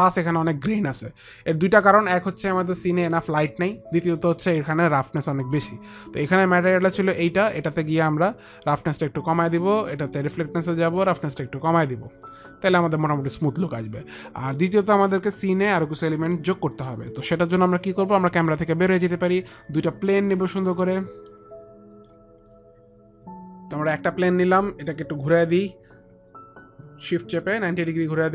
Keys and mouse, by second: 7.4 click, 7.7 click, 11.8 click, 17.5 click, 19.0 click, 21.0 click, 23.4 F9, 25.8 r, 27.0 click.